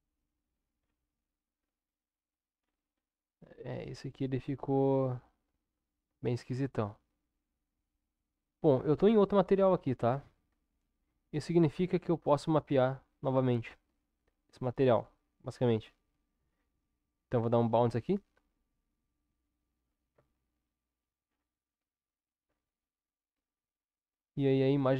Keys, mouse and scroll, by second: 4.0-5.4 middle drag, 6.3 ctrl+KP_7, 12.7 Tab, 15.8 u, 20.1 Tab, 22.9-24.9 middle drag.